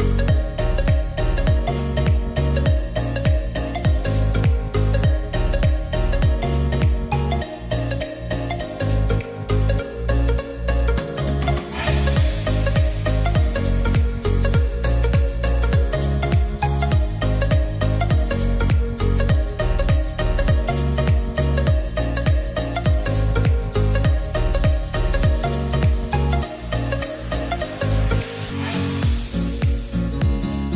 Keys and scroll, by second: 15.2 0, 15.4 Return.